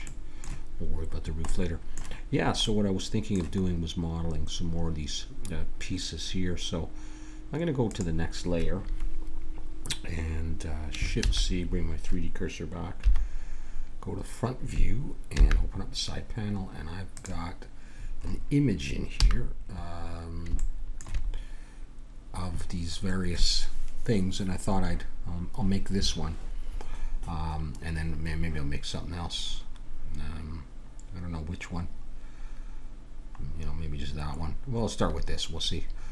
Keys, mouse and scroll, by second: 0.1-4.7 middle drag, 7.8-9.6 drag, 11.1 shift+c, 13.0 KP_1, 15.3 n, 17.1-18.9 drag, 19.2-20.6 middle drag, 19.2 n, 25.5-36.1 middle drag.